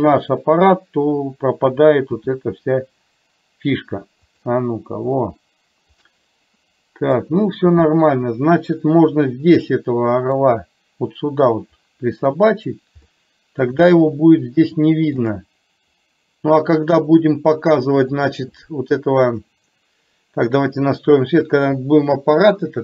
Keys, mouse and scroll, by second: 2.2 g, 6.2-7.3 middle drag, 7.8-8.2 scroll up 1, 8.2-8.9 middle drag, 9.8-10.5 middle drag, 13.2-13.7 middle drag, 14.0-15.4 shift+middle drag, 19.5 click, 21.5 click.